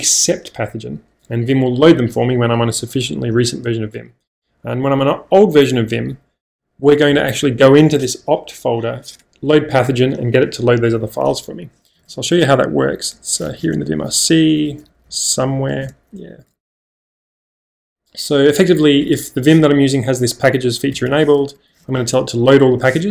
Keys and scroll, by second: 6.8 j, 12.0-17.3 typing, 15.9 Return, 18.5-19.1 typing, 20.9 Escape, 21.0 Escape, 21.8 j.